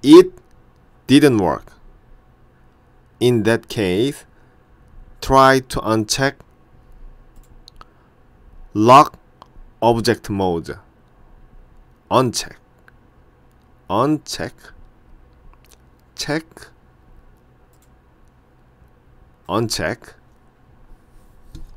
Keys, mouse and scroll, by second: 7.4 click, 17.8 click.